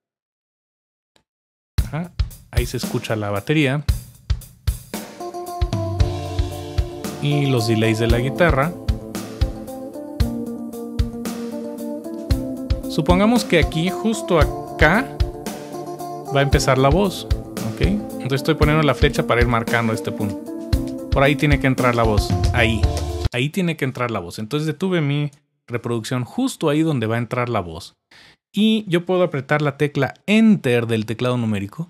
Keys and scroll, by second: 14.4 Page_Down, 16.4-17.1 typing, 23.2 typing.